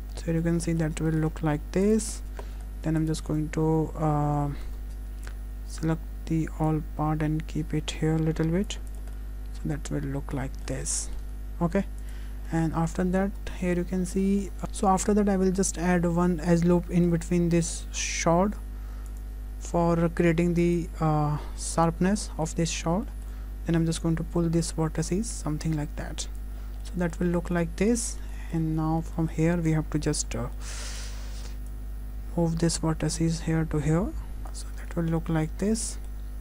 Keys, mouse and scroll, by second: 0.2-0.8 scroll down 2, 0.5 middle click, 1.1 shift+middle click, 1.2 shift+scroll up 1, 1.4 `, 2.2-3.0 scroll up 5, 3.0 click, 3.2 Tab, 4.4 Tab, 4.5-5.3 scroll down 3, 5.3 shift+click, 6.7 click, 8.9 click, 9.2 middle click, 10.8-11.4 scroll down 3, 11.0 middle click, 12.1 `, 12.4-12.7 scroll up 3, 12.7 shift+middle click, 13.3 scroll down 1, 13.7 shift+middle click, 14.0 scroll down 2, 14.3 shift+middle click, 14.3 `, 14.6 ctrl+z, 14.7-15.1 scroll up 1, 15.1-15.5 scroll down 2, 15.5 Tab, 16.4 middle click, 17.7-18.2 scroll up 2, 19.1 click, 20.6 click, 22.2 click, 22.2 middle click, 23.1 shift+middle click, 24.0 click, 26.6-27.1 scroll down 4, 26.8 middle click, 27.3 Tab, 27.6 middle click, 28.1 scroll up 3, 28.4 shift+middle click, 28.6 Tab, 28.8-29.2 scroll up 2, 29.2 shift+middle click, 30.3 1, 30.6 middle click, 31.0 click, 31.7 click, 34.4 click, 34.8 Tab, 34.8 click, 34.9-35.2 scroll down 4, 35.2 middle click, 35.7 scroll down 2, 35.9 middle click, 36.2 scroll up 1.